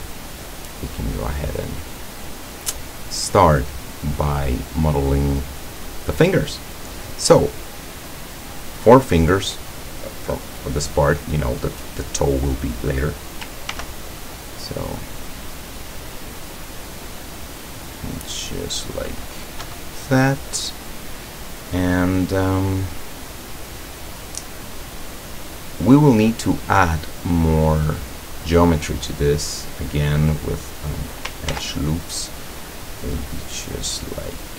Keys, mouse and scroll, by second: 3.6 scroll up 1, 4.1 scroll up 2, 13.7 ctrl+r, 14.9-15.2 scroll up 2, 16.4 scroll up 2, 17.3 scroll up 2, 18.6 click, 19.7 Escape, 29.6-30.8 middle drag, 31.5 ctrl+r.